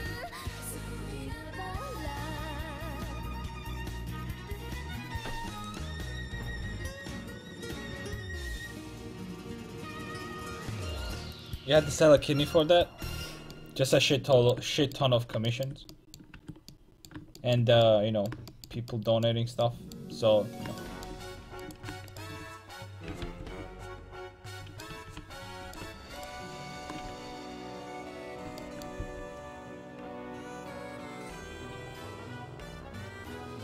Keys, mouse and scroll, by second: 13.6-14.9 middle drag, 16.5 Tab, 18.0 middle click, 18.9 middle click, 21.6-22.6 right drag, 22.6 a, 23.2 alt+t, 24.1 alt+z, 24.9 a, 25.2 a, 27.0 x, 27.8 ctrl+x, 29.0 c.